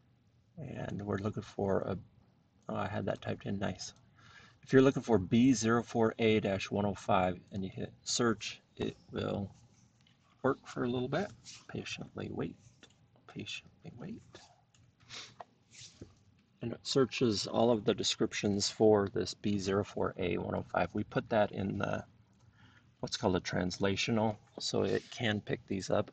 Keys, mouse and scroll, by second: 0.9 click, 3.1 click, 3.9 click, 7.5 click.